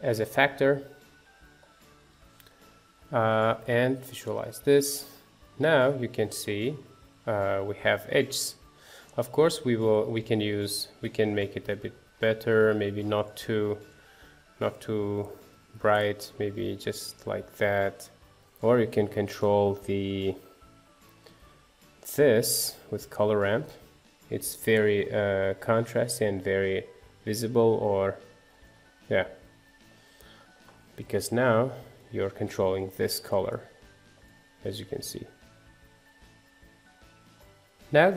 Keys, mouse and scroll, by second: 0.6-1.2 scroll up 2, 1.2-3.7 middle drag, 3.7 ctrl+shift+click, 4.6-5.7 middle drag, 5.7-6.1 scroll down 1, 6.1-8.1 middle drag, 8.1-8.7 scroll up 2, 8.7 middle click, 9.5-9.8 scroll down 1, 9.8-11.5 shift+middle drag, 11.5-16.6 drag, 16.6 scroll down 3, 16.9-18.7 middle drag, 18.7-22.5 drag, 22.5 shift+a, 23.3-24.0 scroll up 6, 24.0 middle click, 24.2-24.6 scroll up 1, 24.6-25.6 middle drag, 25.6-25.9 scroll down 3, 25.9-29.7 middle drag, 29.7 scroll down 3, 30.0-31.2 middle drag, 31.2 ctrl+shift+click, 31.7-32.4 scroll up 8, 32.4 middle click, 33.0-33.4 scroll down 2, 33.4-35.1 shift+middle drag, 35.1-37.6 drag, 37.9 middle click.